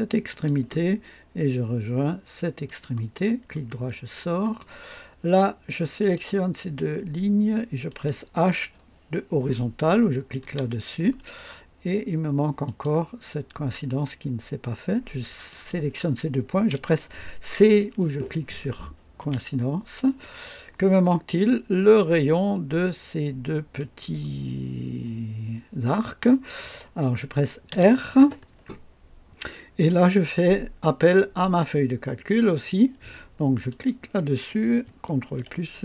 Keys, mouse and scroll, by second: 0.3 click, 2.6 click, 3.5 right click, 4.4 right click, 6.0 click, 7.8 click, 10.4 h, 12.6 click, 15.4 click, 19.2 c, 22.0 click, 23.7 click, 27.7 r, 33.7 click, 35.2 ctrl+v.